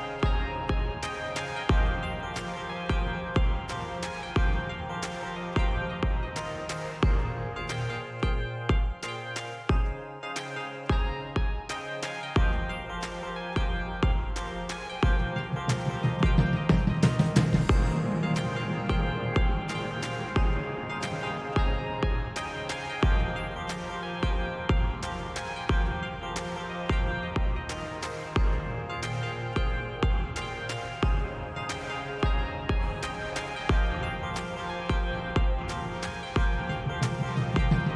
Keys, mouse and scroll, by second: 3.5 click, 8.6-10.5 drag, 10.9-12.2 drag, 12.6-13.4 drag, 13.6-14.7 drag, 16.5 click, 18.0 click, 20.1 click, 21.3 click.